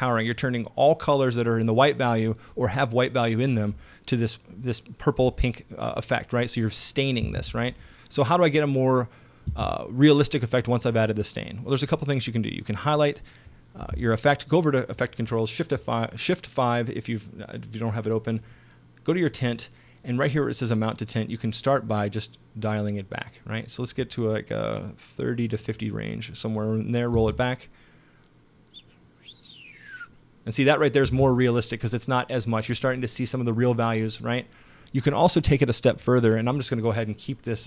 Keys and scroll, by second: 7.2 space, 9.5 space, 27.2 space, 31.1 space.